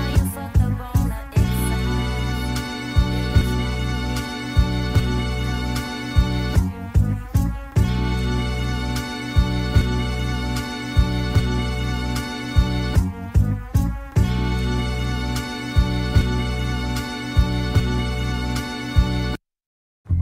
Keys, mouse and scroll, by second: 0.0 shift+d, 1.6 ctrl+a, 5.2 click, 5.3-12.5 middle drag, 7.1 a, 13.0-14.1 shift+drag, 14.1-17.0 middle drag, 17.8 a, 18.0-19.2 right drag, 19.2-20.2 middle drag.